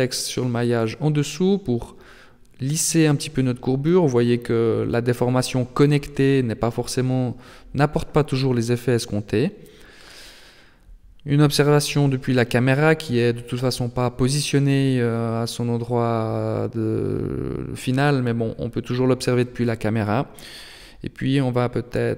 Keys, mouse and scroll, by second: 0.9 middle click, 3.6 right click, 4.3 g, 6.2 middle click, 7.9 Tab, 8.3 middle click, 10.3 KP_0, 12.3-13.5 scroll up 2, 13.9 middle click, 13.9 scroll up 1, 14.4 scroll down 1, 14.7-15.2 scroll up 3, 15.2 middle click, 15.5 Tab, 15.9-16.9 scroll up 2, 16.9 right click, 17.7 g, 20.7 right click, 21.3 g.